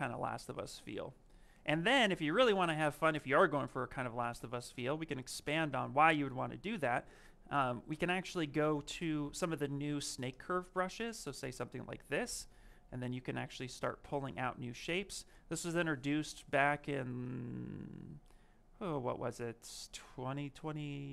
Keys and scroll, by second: 7.8 s.